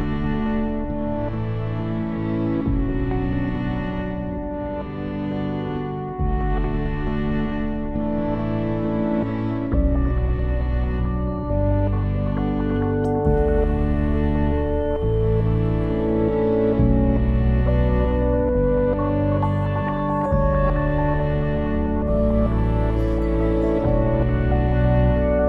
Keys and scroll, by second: 0.4-1.8 typing.